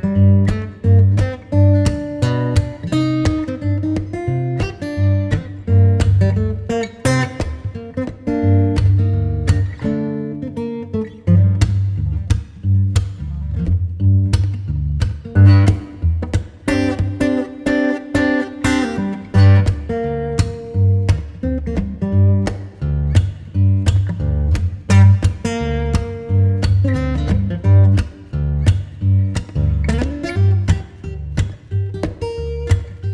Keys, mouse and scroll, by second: 1.2 Return, 1.6-3.0 scroll down 1, 7.0 double click, 20.0 Return.